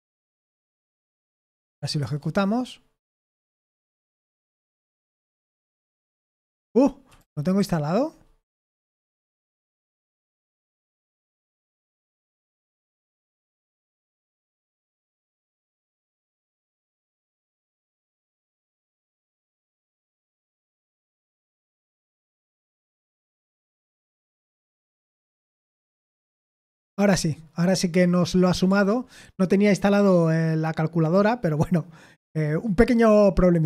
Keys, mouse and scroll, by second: 0.0-1.9 typing, 2.0 Return, 3.2 ctrl+p, 3.7 ctrl+p, 4.5 ctrl+c, 5.1-5.4 typing, 5.6 Return, 6.8-13.4 typing, 18.3 shift+s, 18.6 Return, 19.6 ctrl+p, 19.8 ctrl+p, 21.0 Return, 22.7 ctrl+c, 23.4 ctrl+p, 23.9 ctrl+p, 24.6 ctrl+p, 25.1 ctrl+p, 25.5 ctrl+n, 25.8 Return.